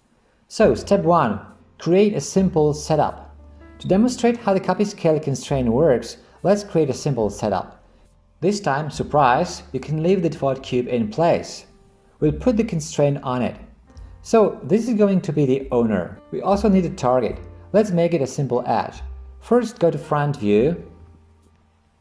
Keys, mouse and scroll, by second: 21.0 KP_1.